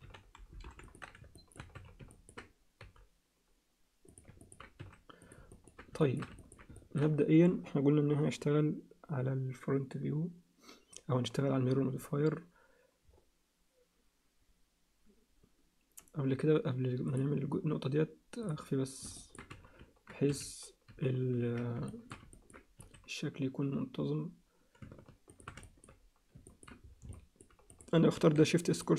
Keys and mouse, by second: 1.3 alt+shift+middle click, 1.7 z, 2.1 ctrl+alt+middle click, 2.8 g, 4.4 ctrl+alt+middle click, 4.8 s, 5.5 ctrl+alt+middle click, 6.0 alt+shift+middle click, 6.4 middle click, 6.7 alt+shift+middle click, 17.1 click, 18.4 click, 19.2 ctrl+alt+middle click, 19.5 z, 20.9 z, 21.9 alt+shift+middle click, 22.3 ctrl+alt+middle click, 22.8 s, 25.6 alt+shift+middle click, 26.5 ctrl+alt+middle click, 27.1 alt+middle click, 27.7 click, 28.1 shift+s.